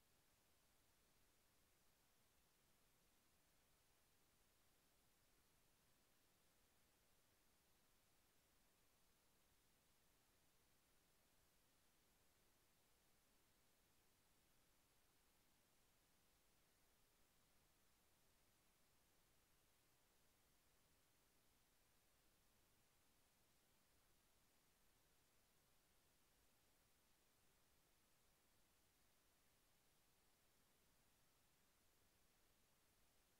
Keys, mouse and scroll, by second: 1.4 click, 2.2 scroll down 1, 3.2 Return, 8.6 click, 16.8 click, 22.4 t, 28.2 v, 31.3 g.